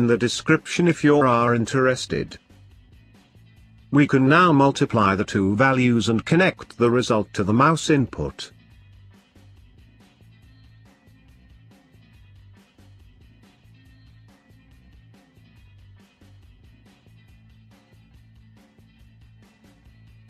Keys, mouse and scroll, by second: 2.5 click, 4.2 click, 6.2 click, 8.8-11.0 drag, 13.3 click, 15.3-19.0 drag.